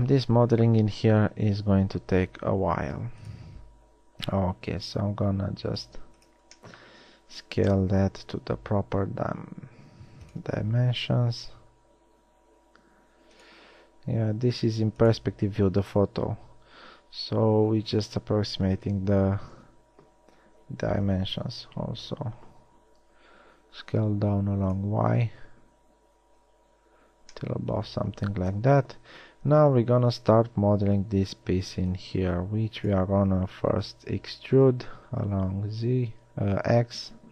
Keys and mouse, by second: 1.7 g, 4.1 s, 9.8 s, 11.2 g, 14.2 s, 20.0 KP_3, 22.0 s, 29.0 KP_1, 31.0 Tab, 34.1 e.